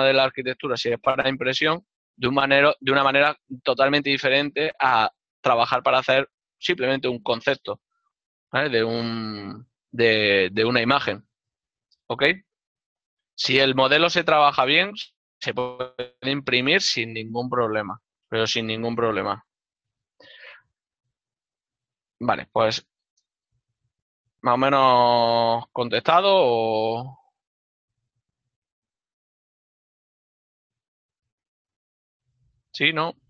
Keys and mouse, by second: 2.3 middle click, 8.9 click, 9.2 alt+click, 14.4 ctrl+middle click, 15.5 KP_Decimal, 17.0 ctrl+middle click, 20.6 ctrl+middle click, 23.1 right click, 23.7 d, 24.3 y, 26.0 ctrl+click, 26.1 ctrl+Tab, 27.3 click, 28.0 right click, 30.1 shift+middle click, 32.3 right click, 32.4 z.